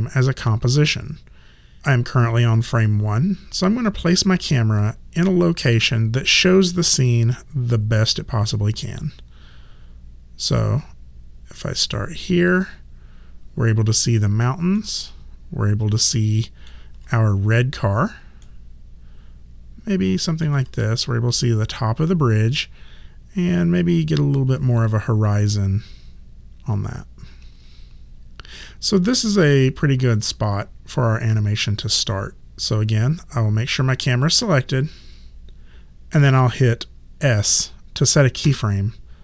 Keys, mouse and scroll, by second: 8.8 alt+click, 10.8 alt+right click, 12.0 alt+click, 14.8 alt+middle click, 18.4 alt+middle click, 22.6 alt+click, 33.7 click, 38.4 s.